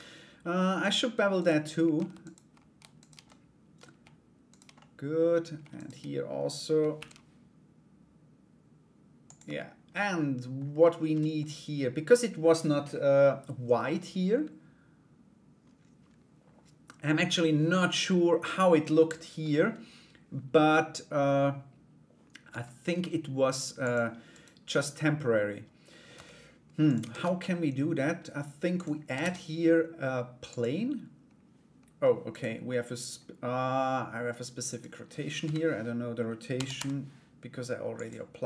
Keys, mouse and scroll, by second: 0.1 middle click, 0.9 right click, 1.8 right click, 2.2 /, 2.5 shift+right click, 2.8 middle click, 4.0 shift+right click, 4.3 middle click, 5.3 shift+right click, 6.5 ctrl+b, 9.0 Tab, 9.5 middle click, 10.4 middle click, 18.4 middle click, 22.0 Tab, 23.4 click, 23.9 right click, 24.3-25.6 middle drag, 25.7 Tab, 26.7 ctrl+a, 28.8 shift+a, 31.9 right click, 34.3 right click, 35.0 KP_7, 36.1 r, 38.1 s.